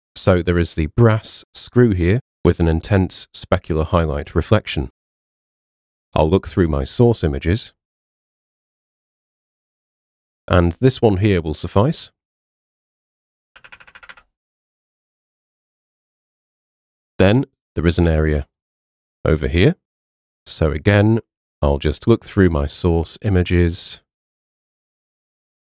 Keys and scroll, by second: 13.5 ].